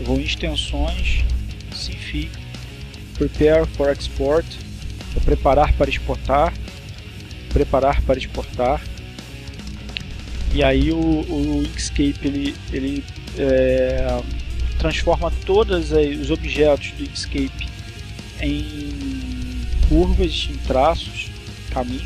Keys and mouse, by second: 8.2 click.